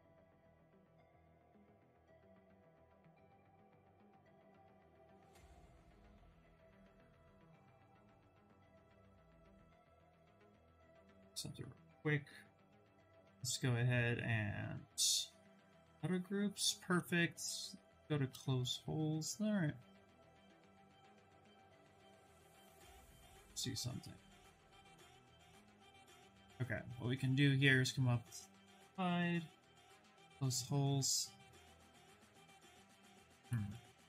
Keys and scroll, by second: 12.4 2, 16.5 2, 21.0 shift+d, 22.7 2, 25.7 Escape, 28.8 2, 33.3 shift+f.